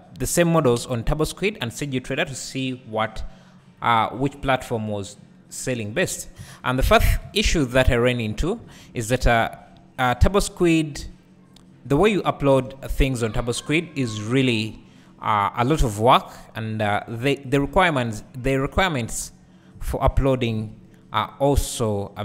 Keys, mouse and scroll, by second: 1.4 b, 3.8-8.1 drag, 6.1 Tab, 8.7 alt+a, 8.9-9.7 scroll down 1, 9.7 `, 11.0-11.6 scroll down 1, 12.5 KP_1, 14.1 scroll down 1, 18.5-19.0 scroll up 1, 19.2 Tab, 19.9 alt+click, 20.6 KP_Decimal, 21.5-22.2 scroll down 1.